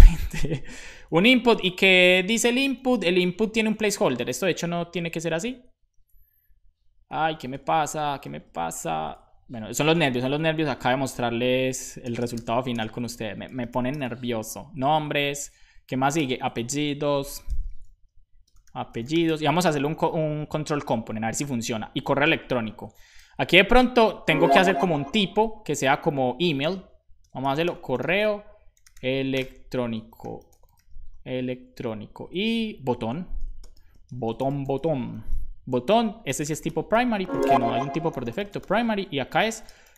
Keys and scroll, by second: 0.3 Down, 0.5 Down, 0.7 Down, 1.1 super+Left, 1.5 Right, 1.7 Right, 1.8 Right, 2.0 Right, 2.2 Right, 3.6 space, 4.9 super+Right, 7.2 super+Right, 7.5 BackSpace, 9.6 Right, 9.9 typing, 12.0-15.0 typing, 12.8 Left, 15.9 Right, 16.7 Left, 16.8 Left, 16.9 Left, 17.5-19.7 typing, 20.2 super+Right, 21.2 Return, 21.8 Up, 23.1 super+v, 23.8 Left, 23.9 Left, 24.3 Left, 27.2-28.7 typing, 31.6 super+s, 31.9 Right, 32.1 Right, 32.4 Right, 32.4 Right, 33.4 Return, 33.9-35.2 typing, 35.9 Left, 36.3-39.9 typing.